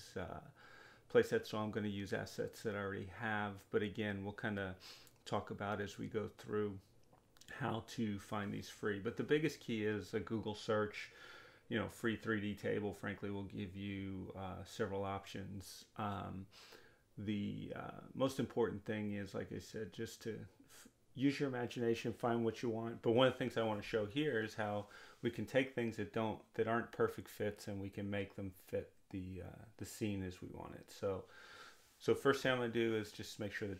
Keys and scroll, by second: 24.6-26.0 typing.